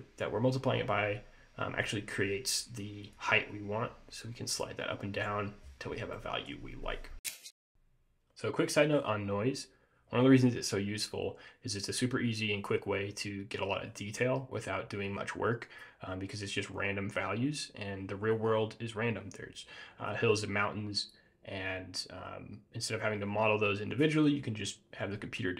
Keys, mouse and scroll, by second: 6.0 scroll down 2, 6.3 middle click, 7.6 scroll down 1.